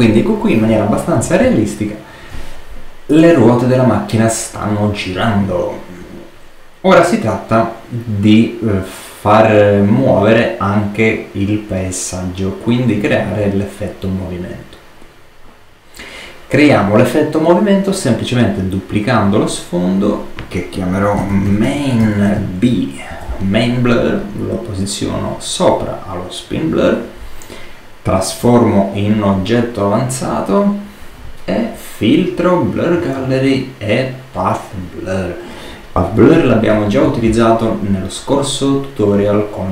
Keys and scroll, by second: 20.8-22.3 typing, 23.0 shift+Return, 36.6 super+-.